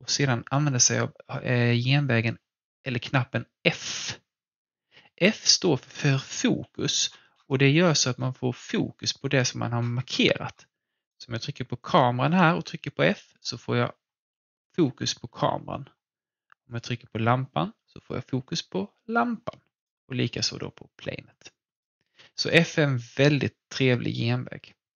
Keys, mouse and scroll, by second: 3.8 f, 6.5 f, 6.7 scroll down 1, 7.6 f, 8.1-8.8 scroll down 1, 8.8 f, 9.8-11.0 scroll down 1, 11.0 click, 12.4-15.8 typing, 16.6 click, 17.1-21.1 typing, 19.7 click, 21.7 click.